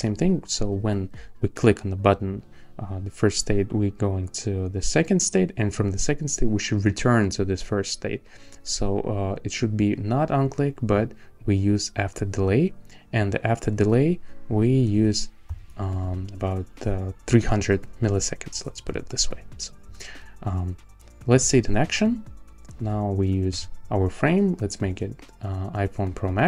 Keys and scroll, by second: 14.0 Left, 14.4 Right, 14.9 BackSpace, 15.5 3, 18.5 Return, 23.5 a.